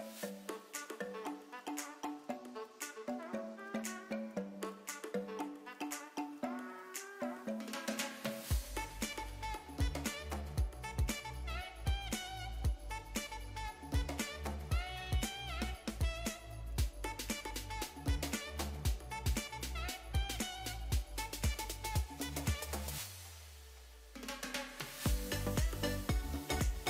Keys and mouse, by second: 0.4 click, 0.6 g, 1.5 click, 1.9-4.8 typing, 2.2 click, 2.9 click, 3.7 click, 4.6 click, 5.4 click, 6.4 e, 7.0 click, 7.4 s, 8.1 click, 8.9 g, 9.3 click, 9.8 middle click, 10.8-15.3 typing, 11.3 click, 12.1 click, 13.5 click, 14.4 click, 15.1 click, 15.6 click, 15.9 Tab, 17.0 Tab, 18.1 l, 19.3 ctrl+space, 21.2 click, 21.9-22.8 drag, 23.2-24.4 drag, 24.8-25.4 drag, 26.2 g.